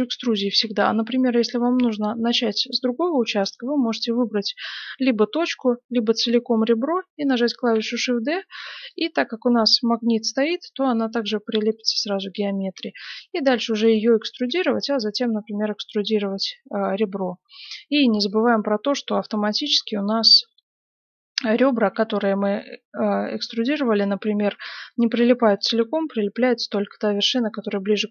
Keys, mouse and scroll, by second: 0.4 ctrl+z, 3.4 right click, 5.5-8.0 right drag, 7.6 shift+d, 8.1 right click, 11.1 g, 12.7 e, 13.8-19.0 right drag, 14.5 e, 16.2 g, 17.5 g, 21.7 g, 23.3-25.4 middle drag, 25.4 right click, 25.8 g, 27.5-28.1 right drag, 28.0 g.